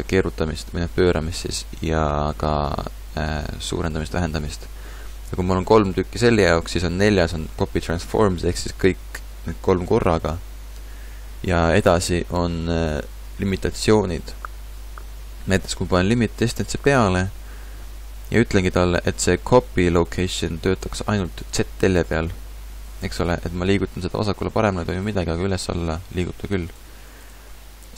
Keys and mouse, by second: 20.7-23.1 drag, 24.1 g.